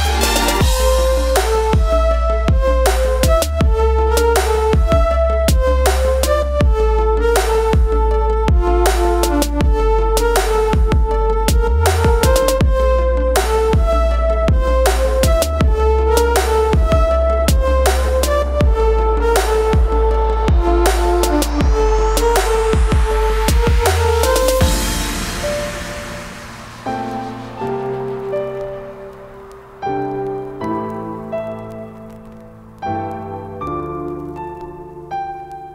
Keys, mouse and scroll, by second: 4.0 Right, 6.7 Down, 7.8 click, 11.8 click, 13.8 click, 16.9-23.5 shift+drag, 26.4-30.5 drag, 30.5 Left, 32.1-34.8 drag, 34.8 right click.